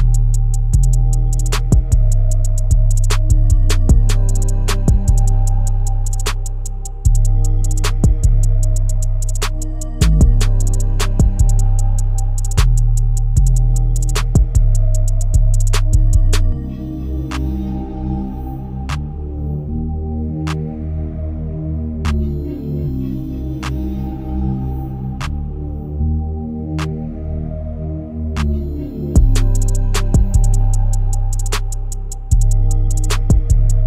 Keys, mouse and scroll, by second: 0.0 click, 1.2 scroll down 1, 1.5-4.5 shift+middle drag, 4.5 shift+a, 6.0 g, 8.0 middle click, 8.8-9.5 scroll down 4, 9.5 click, 9.9 g, 11.8 click, 12.4 s, 18.9 KP_0, 20.2-21.1 drag, 21.5 KP_1, 22.1-22.7 scroll up 3, 22.7-24.1 shift+middle drag, 24.1 shift+d, 26.7 KP_7, 27.3-28.3 scroll down 3, 28.4 KP_3, 30.4 KP_1, 31.3 r, 33.2 KP_7.